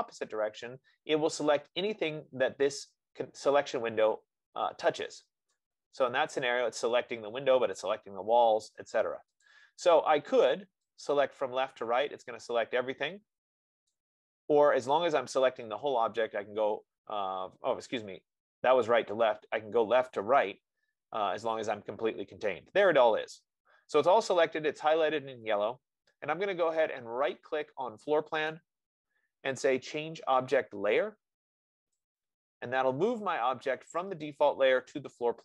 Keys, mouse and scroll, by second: 0.9 click, 5.7-9.9 drag, 14.2 click, 15.5 click, 20.7-25.7 drag, 29.0-32.6 right drag, 32.6-35.4 drag.